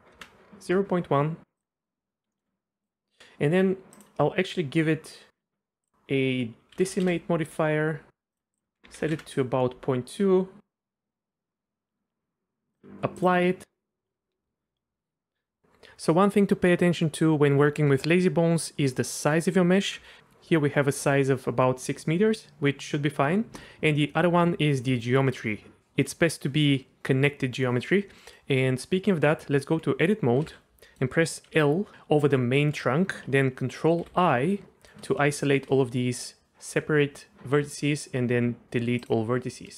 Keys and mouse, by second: 1.6 click, 2.3 middle click, 2.4 g, 3.1 middle click, 5.9-7.6 drag, 8.6-12.3 drag, 12.8-15.6 drag, 20.0 n, 28.2 middle click, 28.7 Tab, 30.5 alt+a, 30.9 click, 31.5 l, 34.0 ctrl+i, 34.6 shift+click, 35.3 shift+click, 35.5 shift+middle click, 37.7 x.